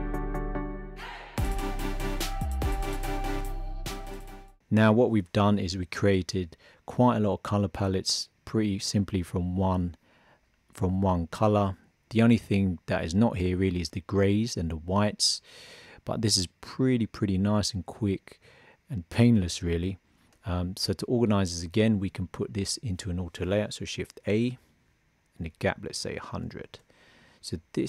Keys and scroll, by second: 0.1 shift+b, 24.1 shift+a.